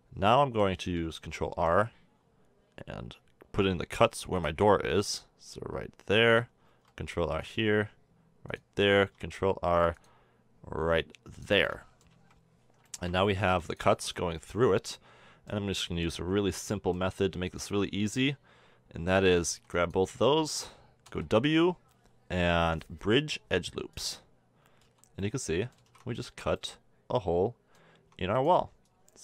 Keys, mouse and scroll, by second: 0.3-1.4 middle drag, 1.4 ctrl+r, 6.7 ctrl+r, 9.0 ctrl+r, 11.7 middle click, 12.1 KP_1, 13.1-14.2 drag, 14.3 click, 14.6-15.6 middle drag, 17.4 a, 17.8 a, 19.5 b, 21.1 w, 24.8 z, 25.8 a, 25.9 Tab, 27.0-27.7 middle drag, 28.0 Tab, 28.4 click.